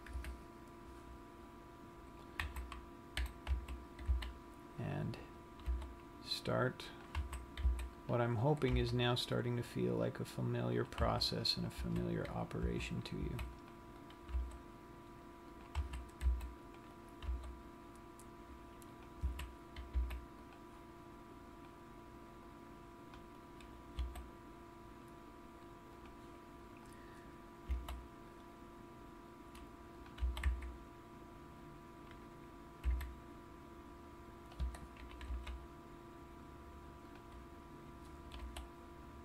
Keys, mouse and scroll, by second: 0.5 KP_3, 2.9 z, 3.9 a, 4.7 c, 6.0 right click, 6.1 g, 7.5 click, 7.8 a, 8.2 c, 9.1 right click, 9.5 g, 11.4 click, 11.8 a, 12.3 a, 13.4 a, 13.7 c, 14.8 g, 16.1 click, 16.4 a, 16.6 c, 17.7 right click, 17.9 g, 19.9 click, 20.1 a, 20.4 c, 24.1 right click, 24.5 e, 26.7 click, 27.8 e, 28.3 s, 30.5 click, 30.7 g, 35.7 g, 37.8 click, 38.8 r.